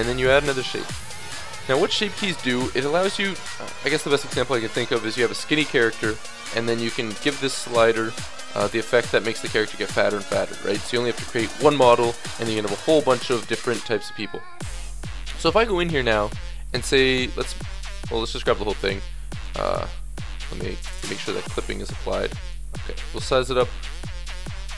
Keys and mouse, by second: 8.6-10.4 drag, 14.1-14.7 middle drag, 14.7 Tab, 16.1 a, 16.7 b, 17.6 click, 17.9 a, 18.4 a, 18.4 s, 19.8 ctrl+z, 20.7-23.0 drag, 23.2 s.